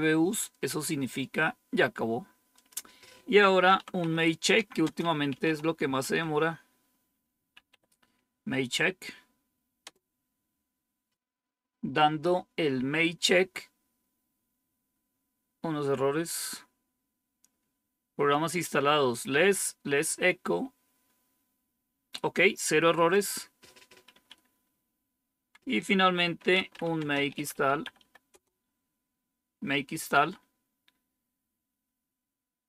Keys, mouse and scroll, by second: 2.4 click, 3.3-8.1 typing, 9.7 Return, 16.3-17.0 scroll down 1, 23.0 click, 24.0 Up, 25.2 Down, 26.0-28.4 typing.